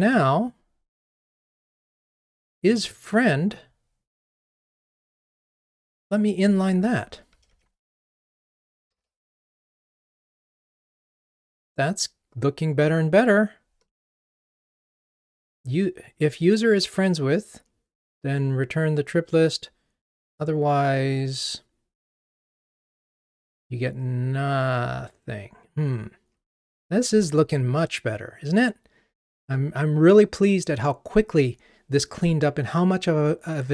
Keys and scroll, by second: 7.5 alt+super+n.